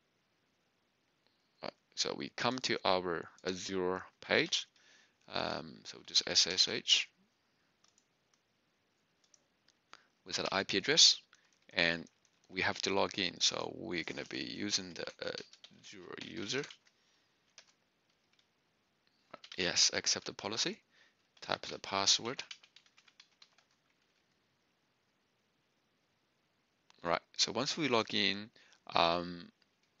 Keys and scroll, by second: 6.8 typing, 10.5-11.2 typing, 12.4 Left, 14.8-16.7 typing, 17.5 Return, 19.1-23.3 typing, 23.5 Return.